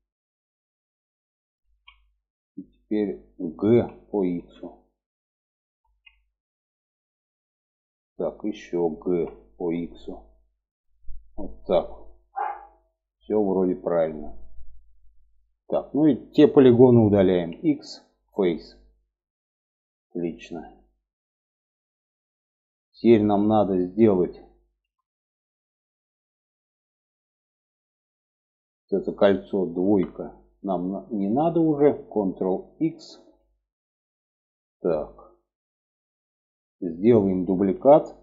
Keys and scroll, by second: 1.0 alt+z, 3.1 g, 5.2 alt+z, 8.4 g, 16.8 x, 29.2 2, 32.3 ctrl+x, 38.1 a.